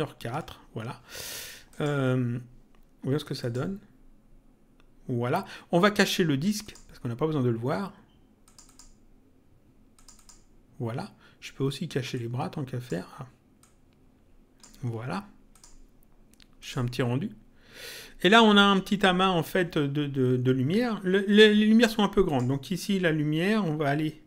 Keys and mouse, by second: 1.7 click, 3.4 click, 6.6 click, 8.4 click, 9.9 click, 12.1 click, 13.6 click, 15.5 click, 22.2 click.